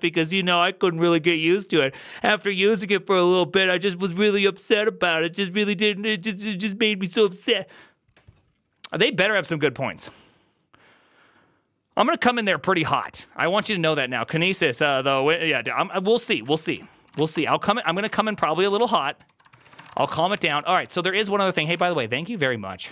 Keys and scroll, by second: 16.2 alt+{, 16.2 ctrl+a, 16.4-21.9 typing, 16.7 ctrl+c, 16.9 ctrl+c, 17.0 ctrl+:, 17.2 Return, 19.4 ctrl+c, 20.4 ctrl+:, 20.6 Return, 20.7 ctrl+d.